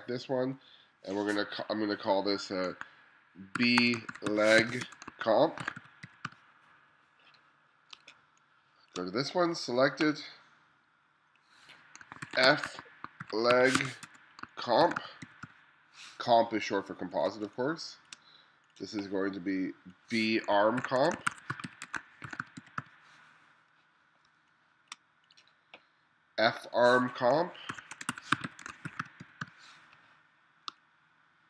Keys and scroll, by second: 3.6-6.8 typing, 8.0 space, 12.3-16.0 typing, 17.5 space, 20.6-24.3 typing, 27.5-30.8 typing.